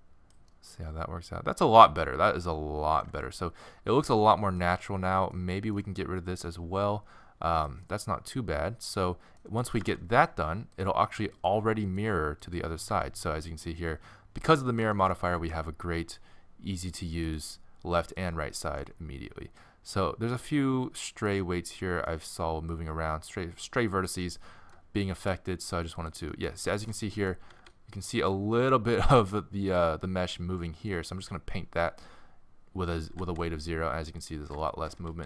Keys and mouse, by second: 1.6 middle click, 1.9 middle click, 3.3 middle click, 5.0-6.0 middle drag, 6.0-7.9 drag, 7.9-9.8 middle drag, 9.9 alt+r, 13.0 r, 15.5 r, 18.6 middle click, 19.6 click, 19.6 right click, 21.5-22.8 middle drag, 25.1 r, 26.1 click, 27.5 r, 27.8 middle click, 28.0 middle click, 28.2 middle click, 33.2 r, 35.0 r, 35.2 middle click.